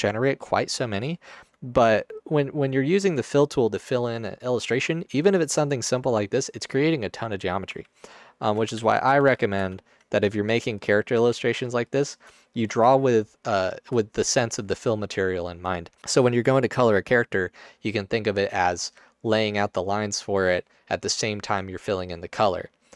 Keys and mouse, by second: 8.8 ctrl+z, 9.2 ctrl+z, 9.6 ctrl+z, 10.3 Tab.